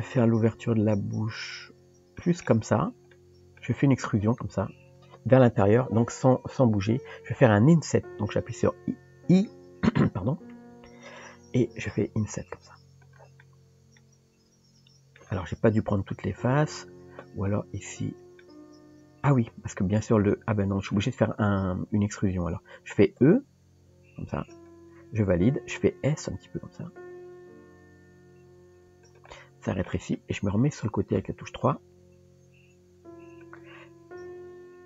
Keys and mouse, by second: 3.1 middle click, 13.4-15.2 middle drag, 16.3 ctrl+z, 18.4 middle click, 20.3 middle click, 23.5 e, 29.3 middle click, 31.2 KP_3, 32.9 r, 34.2 g.